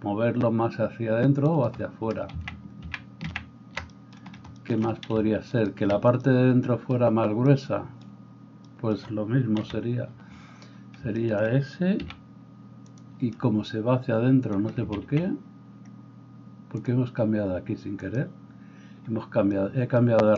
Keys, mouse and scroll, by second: 2.4 ctrl+z, 2.9 ctrl+z, 3.3 ctrl+z, 5.5 middle click, 5.5 right click, 9.6 KP_7, 12.0 s, 13.1-16.8 middle drag, 15.1 ctrl+z, 16.8-20.3 drag.